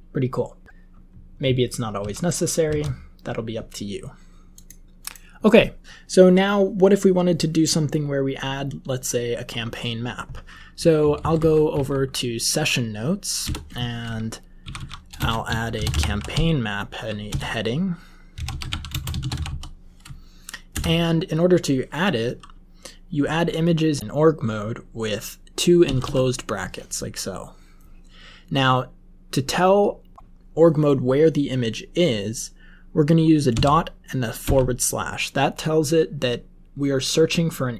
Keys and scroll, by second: 1.9 ctrl+w, 2.6 ctrl+w, 11.0 Up, 11.2 Up, 11.3 Up, 11.7 Up, 13.4 Return, 14.6-19.8 typing, 20.7 Return, 25.8 typing, 33.6-34.4 typing.